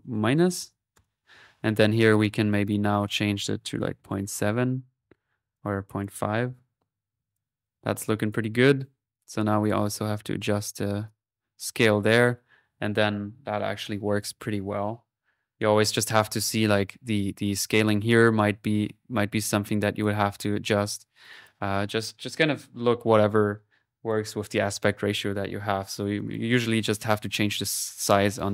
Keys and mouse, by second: 2.0-4.1 drag, 5.6 click, 8.3 click, 8.8-9.6 typing, 9.2-12.8 drag, 15.2-16.0 typing, 17.8-20.8 drag, 20.6-21.3 typing, 21.3 ctrl+click, 26.2 click.